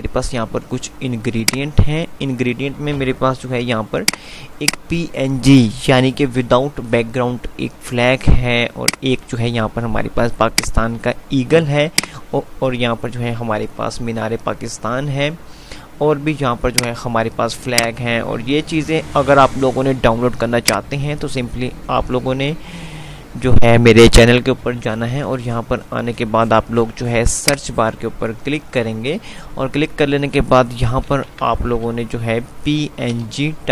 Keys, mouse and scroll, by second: 1.5 click, 1.7-2.2 F2, 4.0 click, 9.0-11.0 drag, 16.8 click, 17.2 typing, 20.5 click, 29.7 F5, 31.3-32.5 typing, 33.3 Return.